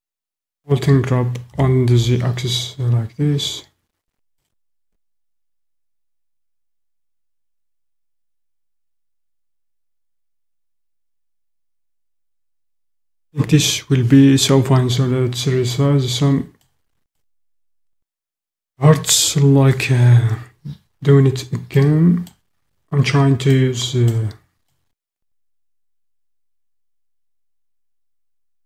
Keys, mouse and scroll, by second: 1.4 g, 2.0 z, 4.4 click, 5.9-7.0 drag, 7.0-8.3 middle drag, 8.3 click, 8.4 middle click, 9.3 middle click, 9.6 middle click, 9.8 middle click, 10.3-12.6 middle drag, 15.7 click, 17.2 click, 17.6 middle click, 17.7 click, 21.8 click, 21.9 middle click, 23.5 click, 23.7 middle click, 24.8-26.5 middle drag.